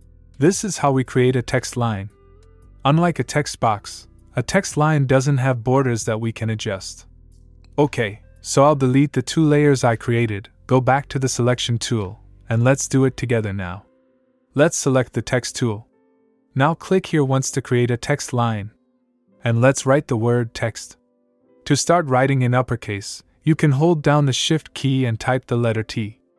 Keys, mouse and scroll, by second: 0.4 click, 2.8 click, 7.9 click, 11.9 click, 16.4 click, 19.2 click, 23.9 shift+Num_Lock, 24.5 shift+t.